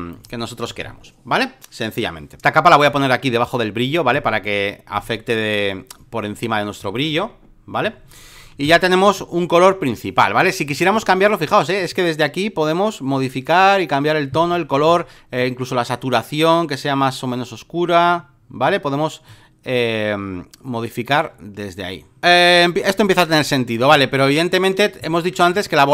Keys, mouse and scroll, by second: 2.4-7.0 drag, 7.0 middle click, 7.8 alt+middle click, 7.8-8.4 alt+scroll, 8.0 alt+middle click, 8.3 alt+middle click, 8.4 space, 8.6 click, 10.6-14.7 drag, 14.8 ctrl+z, 15.3-22.2 drag, 22.2 v, 23.3 space, 23.4 click, 25.5 click.